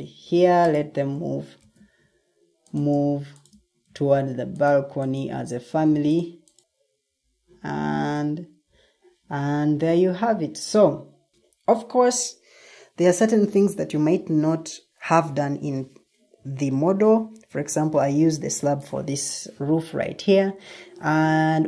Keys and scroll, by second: 0.5 ctrl+m, 2.6 ctrl+d, 4.1 ctrl+d, 4.8 Escape.